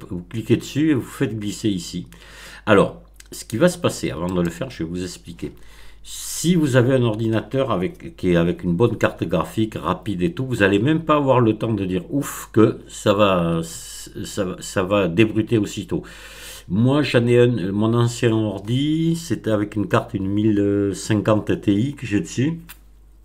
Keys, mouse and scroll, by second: 4.2 click.